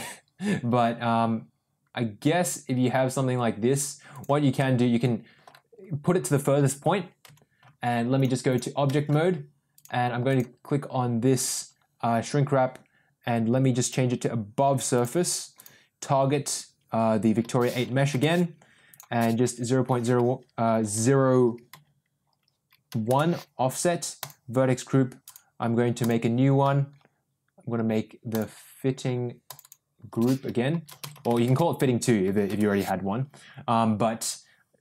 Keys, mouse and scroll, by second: 4.5 scroll up 1, 4.5-5.4 middle drag, 6.6 Tab, 7.5 Tab, 8.1 click, 8.8 middle drag, 9.7 click, 10.2 click, 13.7-15.2 drag, 15.5-18.5 drag, 18.9-23.6 drag, 24.2-25.3 drag, 25.9 click, 28.3 click, 29.4 click, 29.5-33.0 drag, 31.1 t.